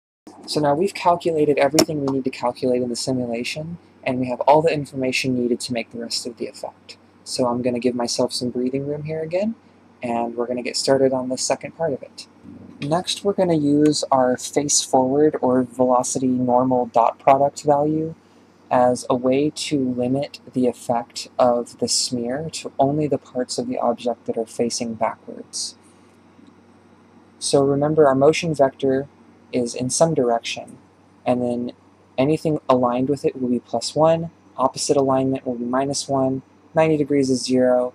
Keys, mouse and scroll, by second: 0.0 ctrl+space, 0.2 click, 0.5 n, 0.8 click, 1.8-4.3 drag, 4.5 click, 6.6 ctrl+space, 7.7-12.3 drag, 12.8-18.9 middle drag, 18.9-22.9 drag, 26.8-27.2 scroll up 4, 27.3-29.0 shift+middle drag, 29.0 f, 29.9-33.1 drag, 33.1 d, 33.7-34.8 drag, 34.8 d, 35.3-36.5 drag, 36.5 d, 37.6-37.9 drag.